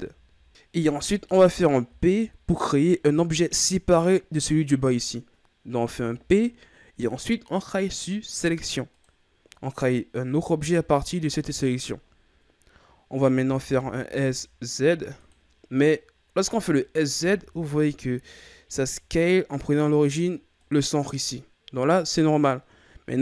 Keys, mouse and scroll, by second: 5.8 p, 10.2 Tab, 11.1 right click, 13.4 s, 15.9-16.7 scroll down 3, 16.7-17.1 shift+scroll up 4, 17.1 s.